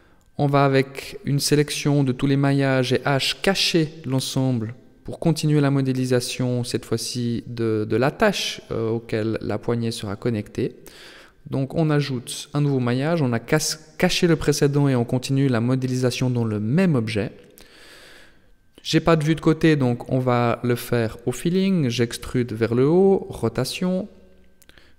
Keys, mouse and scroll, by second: 0.1 h, 1.3 shift+a, 3.0 scroll down 4, 3.8 s, 5.8-6.4 scroll up 4, 6.4 shift+middle click, 7.5 g, 10.5 right click, 10.8 shift+right click, 11.3 right click, 12.2 g, 16.6 KP_3, 17.6 a, 17.9 a, 18.4-20.4 scroll up 2, 20.4 e, 22.9 r.